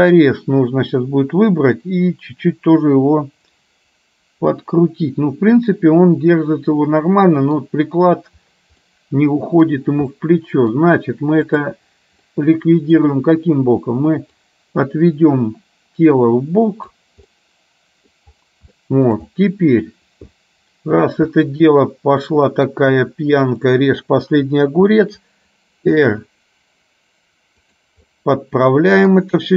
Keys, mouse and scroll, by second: 2.0-7.7 middle drag, 8.9 middle click, 10.3 middle click, 12.4 middle click, 14.4-17.2 drag, 17.4-18.2 scroll up 1, 18.2-18.7 scroll down 1, 18.8 shift+middle click, 19.5-19.9 scroll up 1, 20.4 shift+middle click, 21.6-22.3 scroll up 1, 22.3-22.8 scroll up 1, 23.5 click, 24.8 r, 28.2-29.2 middle drag.